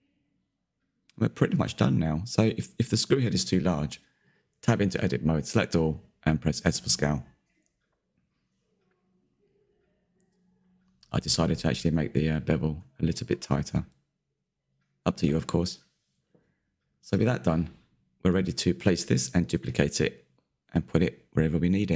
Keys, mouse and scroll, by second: 1.1 KP_3, 1.8-2.4 scroll up 6, 2.4-3.3 shift+middle drag, 3.3-3.9 scroll up 3, 3.9 Tab, 4.9 1, 4.9 a, 5.0 s, 8.4 Tab, 9.3 click, 10.7-11.1 scroll up 5, 10.8 shift+middle click, 11.1 Tab, 11.6 click, 11.7 click, 12.0 shift+click, 12.3 middle click, 12.9 shift+click, 13.4 q, 13.8-16.1 drag, 16.1 middle click, 16.6 Tab, 16.9 click, 17.0-17.4 scroll down 1, 17.4 q, 17.6-18.3 scroll down 5, 17.7 middle drag, 18.3-19.9 middle drag, 19.7-20.8 scroll up 13, 20.8-21.4 shift+middle drag, 21.4-21.9 scroll down 9.